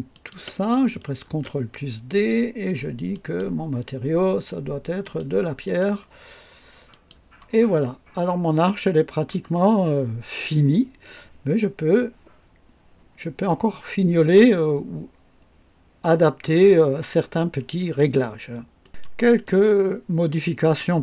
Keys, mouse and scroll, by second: 0.1 ctrl+click, 1.2 ctrl+d, 3.1 click, 5.0 click, 5.6 click, 6.9 click, 7.8 scroll up 1, 8.6-9.5 right drag, 18.8 right click.